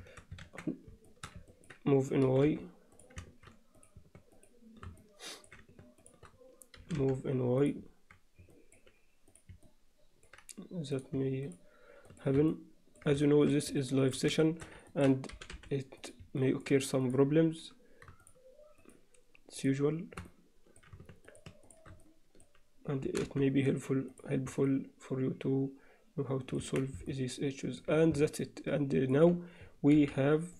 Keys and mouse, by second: 0.1 shift+Tab, 0.5 shift+Tab, 1.1 alt+shift+middle click, 1.5 ctrl+middle click, 2.3 g, 4.4 shift+click, 5.0 alt+middle click, 6.8 g, 8.5 alt+middle click, 9.3 click, 9.7 alt+middle click, 11.0 click, 11.5 shift+click, 12.1 shift+click, 12.5 middle click, 13.3 shift+middle click, 13.8 middle click, 14.5 shift+middle click, 14.9 ctrl+alt+middle click, 15.3 g, 16.4 middle click, 18.9 shift+click, 19.6 shift+click, 20.3 alt+middle click, 21.3 shift+click, 21.7 shift+click, 22.1 middle click, 23.1 g, 24.7-26.6 middle drag, 26.7 Tab, 27.1-27.9 alt+middle drag, 28.3-29.1 alt+middle drag, 30.0 alt+h.